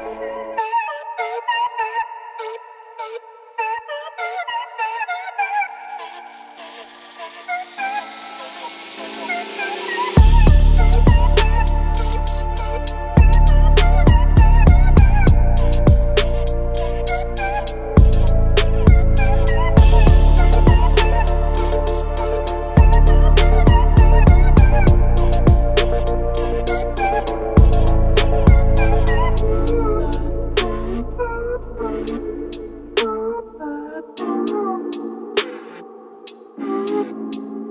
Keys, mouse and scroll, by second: 0.1 Tab, 0.1-6.9 drag, 8.5-9.9 drag, 11.5 click, 13.8-14.2 middle drag, 15.1 click, 19.4 click, 23.5 click, 24.4 click, 27.4-28.7 middle drag, 29.6-33.1 right drag, 34.0 click, 34.5-35.1 middle drag, 36.1 KP_1, 37.6 shift+a.